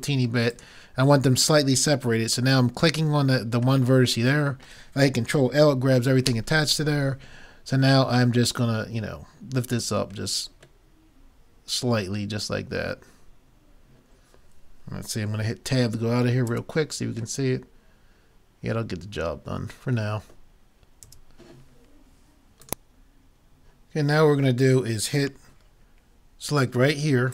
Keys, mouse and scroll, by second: 6.3 ctrl+l, 8.5-9.9 drag, 10.1 click, 10.9 middle click, 11.7 middle click, 16.5 Tab, 21.1 Tab.